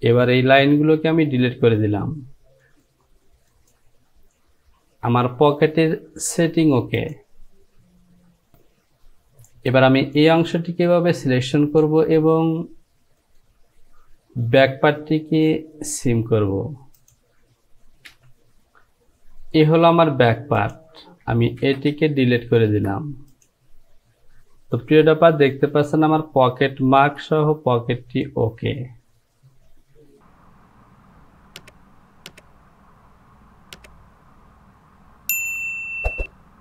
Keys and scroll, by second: 0.5 Delete, 6.4 Home, 18.3 j, 21.7 shift+z, 22.2 shift+z, 24.9 Home, 27.2 Delete.